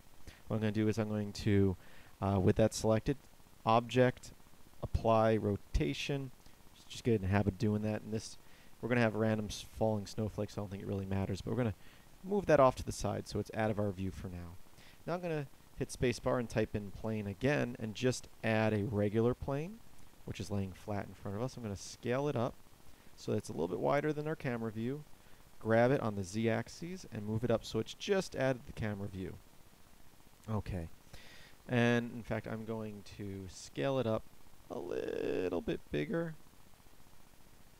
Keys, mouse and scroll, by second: 0.0 Escape, 14.7 space, 25.3 g.